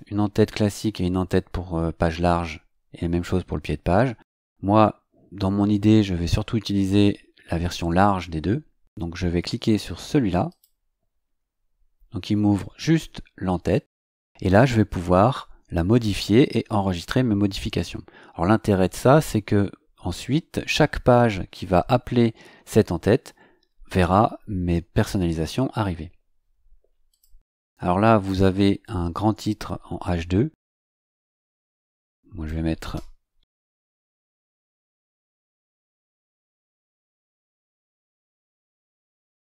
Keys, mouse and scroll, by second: 10.5 click, 27.1 click, 31.0-32.6 drag, 33.3-34.2 typing, 35.3-38.9 typing.